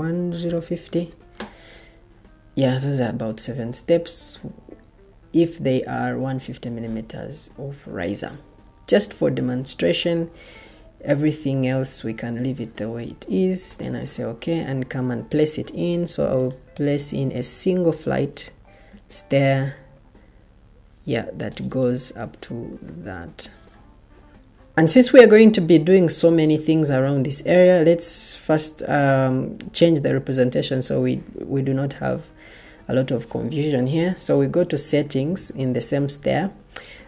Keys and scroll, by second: 0.0-0.9 typing, 17.6 Caps_Lock, 23.3 Escape, 23.8 ctrl+z, 33.3 ctrl+t.